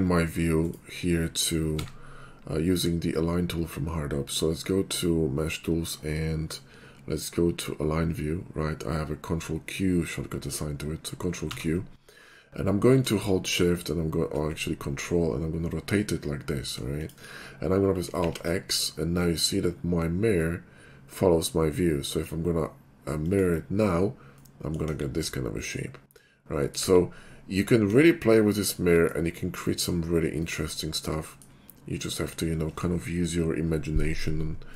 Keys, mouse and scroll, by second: 0.1 ctrl+q, 0.6 right click, 1.8 q, 11.5 ctrl+q, 13.6 shift+3, 13.7 shift+5, 14.9 ctrl+middle click, 16.3-17.0 scroll up 23, 17.0 click, 18.3 alt+x, 23.3 click, 24.3-24.8 middle drag, 25.2-26.8 middle drag, 30.5 shift+middle click, 31.2 shift+middle drag, 34.6-34.7 middle drag.